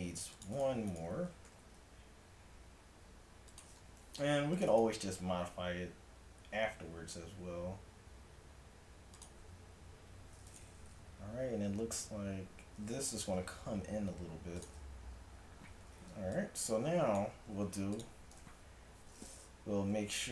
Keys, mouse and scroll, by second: 0.2 ctrl+r, 1.0-2.7 drag, 1.5 g, 4.2 ctrl+r, 7.4 s, 9.8 a, 10.5-12.4 drag, 13.4 g, 15.7 a, 16.4-18.2 drag, 17.7 x, 19.4 middle click, 20.0-20.3 drag, 20.0 a.